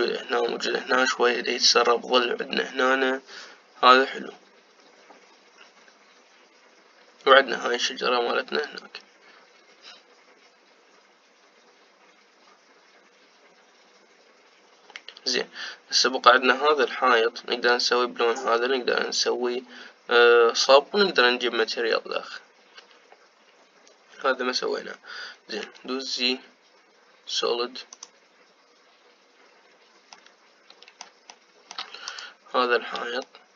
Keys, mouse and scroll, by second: 26.9 z, 31.0-32.9 middle drag, 32.9-33.5 drag.